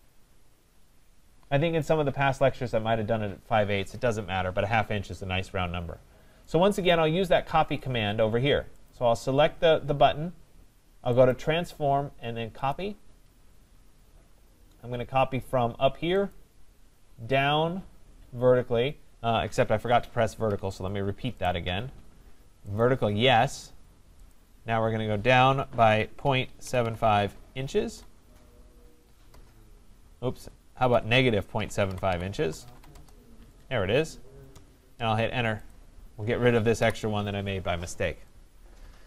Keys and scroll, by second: 20.4 Escape, 29.3 Return, 36.7 Delete.